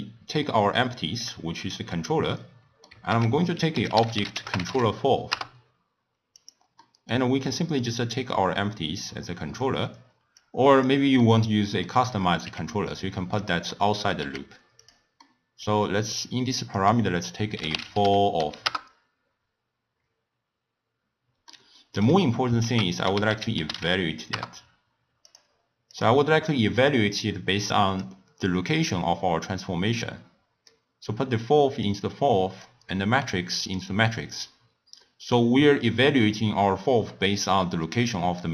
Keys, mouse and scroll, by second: 0.8-3.1 shift+middle drag, 3.1 ctrl+a, 6.8-8.1 middle drag, 8.1 click, 8.9-11.2 drag, 11.2-12.4 middle drag, 12.4 g, 13.7 middle click, 14.2 g, 15.2-16.6 middle drag, 16.6-17.9 drag, 17.9 l, 21.4-22.6 middle drag, 22.6 ctrl+a, 25.9-28.9 drag, 30.6 click, 32.6-34.4 drag.